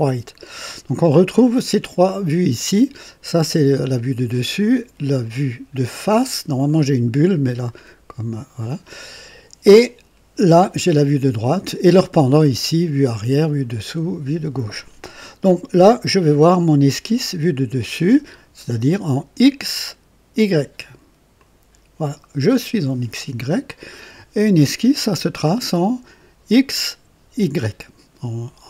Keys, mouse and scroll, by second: 16.4 click, 21.3 click, 23.3-24.3 right drag.